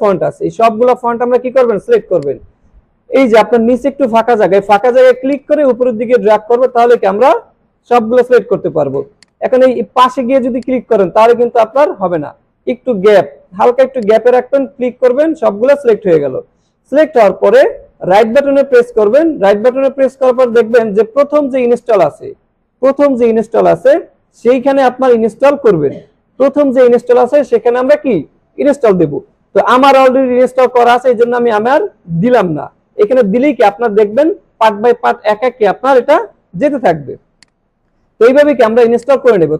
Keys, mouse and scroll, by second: 2.2 click, 5.3-6.8 drag, 9.2-11.2 drag, 14.0-15.8 drag, 18.2 right click, 20.4 click, 37.4 click.